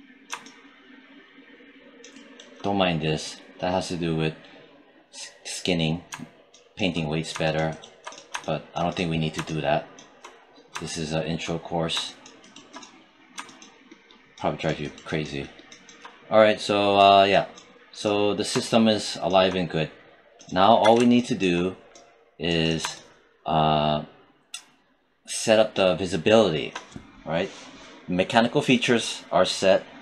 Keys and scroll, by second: 20.6 w.